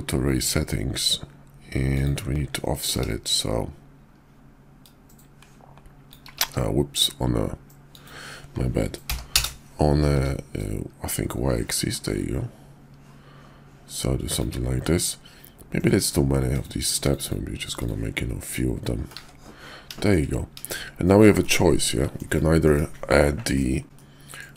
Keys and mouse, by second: 16.8 click, 18.5-19.1 middle drag, 19.2 `, 20.0 shift+middle drag, 21.4-22.2 middle drag, 22.6 KP_5, 23.5-23.8 middle drag, 23.9-24.5 middle drag.